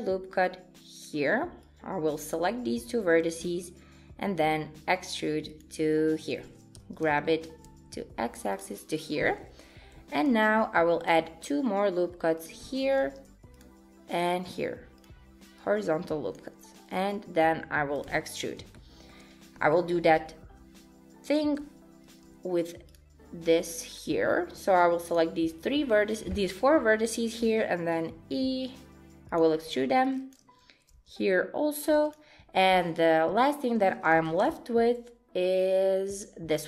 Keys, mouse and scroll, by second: 1.6 click, 3.5 e, 6.7 g, 10.3 ctrl+r, 13.0 ctrl+r, 15.6 click, 17.1 e, 18.8 shift+middle click, 22.1 ctrl+r, 24.5 click, 27.4 e, 30.1 click, 31.0 e, 32.6 shift+middle click, 34.2 g.